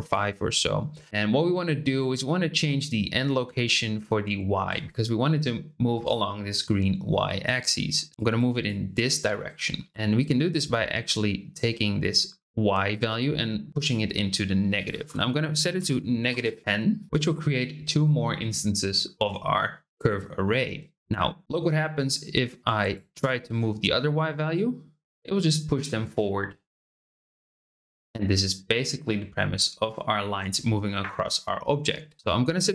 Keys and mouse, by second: 8.1 click, 8.6 click, 9.9-14.3 drag, 14.9-16.7 drag, 22.6 click, 23.2 click, 24.5-32.1 drag.